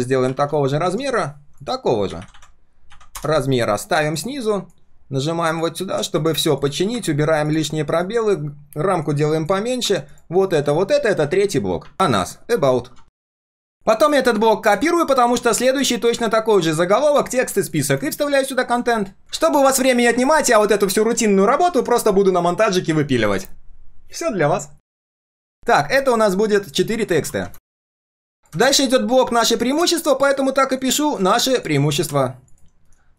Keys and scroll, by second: 10.9 ctrl+g, 11.3 ctrl+r, 27.7 ctrl+a, 31.9 ctrl+v, 32.8 alt+h.